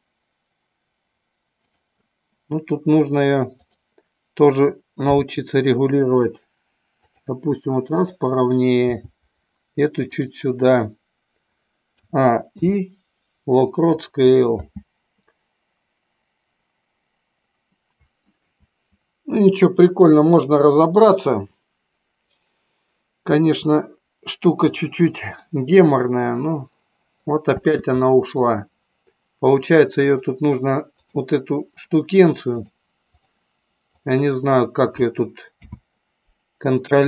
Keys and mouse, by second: 1.8 drag, 3.6 click, 5.2 g, 7.2 click, 7.9 click, 8.9 g, 10.3 click, 12.1 a, 12.7 i, 14.7 space, 25.6-27.3 middle drag, 27.7 space, 28.1-28.5 middle drag, 30.2 click, 31.1 click, 32.8 click, 35.5 n, 36.9-37.0 drag.